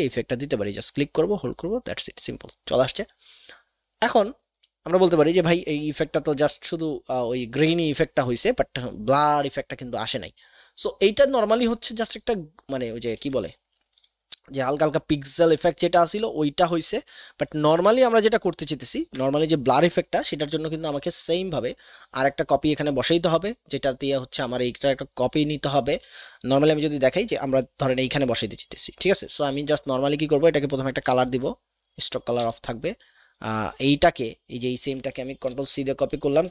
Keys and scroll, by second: 16.4-16.9 typing, 31.3 x, 32.4 v, 35.4 ctrl+c.